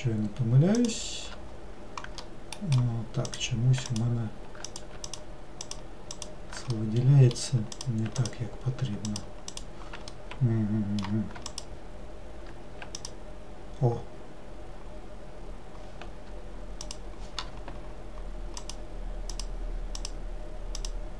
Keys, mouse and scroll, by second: 0.8 alt+click, 2.3-3.3 middle drag, 3.3 click, 4.0 alt+click, 4.7 click, 5.1 alt+click, 5.7 alt+click, 6.2 alt+click, 6.8-7.8 middle drag, 7.8 click, 8.2 alt+click, 9.1 alt+click, 9.6 alt+click, 10.1-11.5 middle drag, 11.5 alt+click, 13.0 alt+click, 18.7 alt+click, 19.4 alt+click, 20.0 alt+click, 20.8 alt+click.